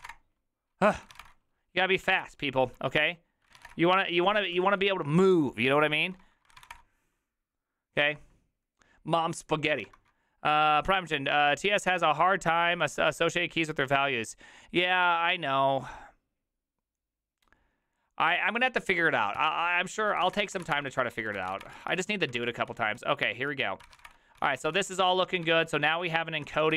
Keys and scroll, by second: 0.0-7.2 typing, 2.0 ctrl+c, 20.0-24.4 typing, 22.4 ctrl+c, 24.6 ctrl+u, 24.9 ctrl+u, 25.4 ctrl+u, 25.4 ctrl+d, 25.6 ctrl+d, 25.7 ctrl+d, 25.8 ctrl+d, 26.5 ctrl+d, 26.5 ctrl+^, 26.6-26.7 typing.